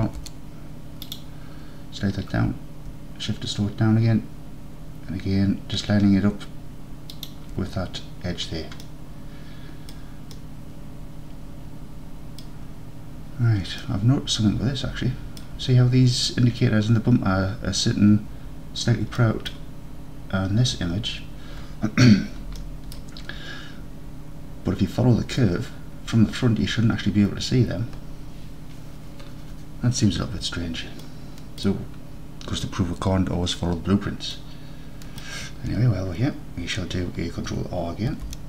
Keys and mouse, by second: 0.1 ctrl+r, 7.2 shift+click, 8.9-10.0 middle drag, 10.5-11.7 middle drag, 12.1 middle click, 13.9-15.5 middle drag, 19.3 middle click, 22.6 middle click, 22.9 middle click, 31.1 middle click, 31.6 middle click, 34.4 middle click, 35.0 middle click, 38.2 ctrl+r.